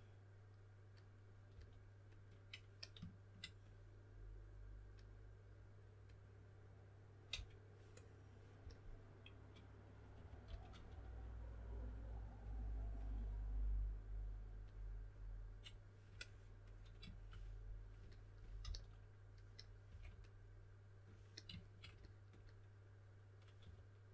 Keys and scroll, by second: 1.5 typing, 7.3 s, 8.5 typing, 9.9-11.3 typing, 18.6-20.3 typing, 23.6 4.